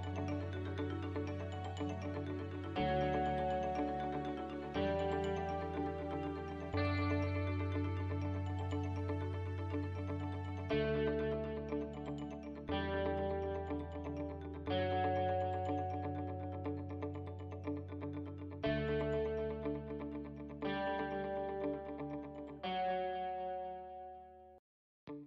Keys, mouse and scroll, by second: 2.2-3.1 scroll down 6, 3.5 e, 8.5 shift+middle click, 9.4 KP_Decimal, 9.8-10.7 scroll down 6, 10.7 middle click, 11.9 shift+d, 13.4 right click, 15.7 n, 16.5 click, 17.4 click, 18.1 click, 18.9 click, 19.6-20.0 scroll down 1, 20.4 n, 21.3 scroll down 1, 22.5 s.